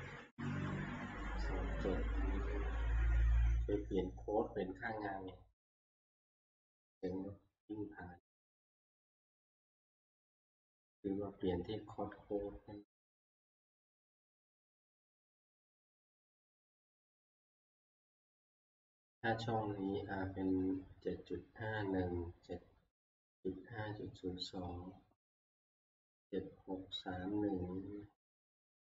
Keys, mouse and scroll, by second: 0.7 Tab, 4.0-5.1 drag, 13.1 click, 14.4 click, 15.7 click, 16.1 click.